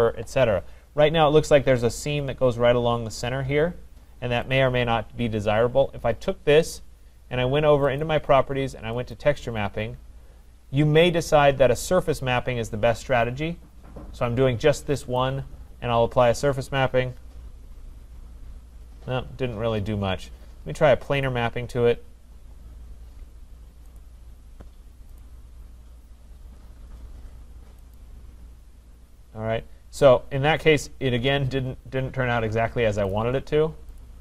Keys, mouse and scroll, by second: 4.6 click, 8.0 click, 9.1 click, 15.5 click, 21.3 click, 24.1 click, 25.3 click, 28.1 click, 33.1 click, 34.0 click.